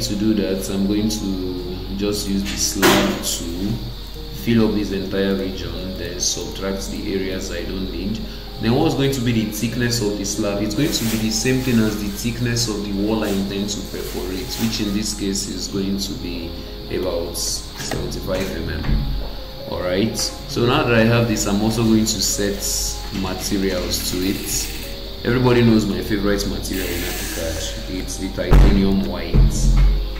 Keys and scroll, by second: 17.9 Return.